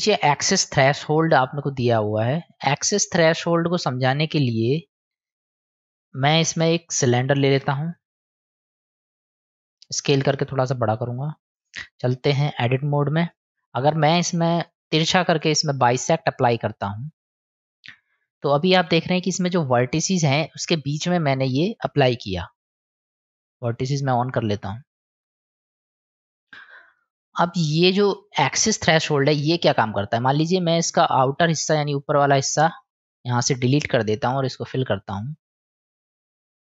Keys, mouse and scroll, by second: 5.4 Tab, 6.4 Delete, 7.6 shift+a, 10.3 s, 12.4 Tab, 13.5 ctrl+z, 13.5 middle click, 13.9 click, 14.9-17.2 drag, 23.3 click, 24.3-26.5 middle drag, 30.5 click, 30.8 click, 31.7 click, 33.1 click, 34.1-36.2 middle drag.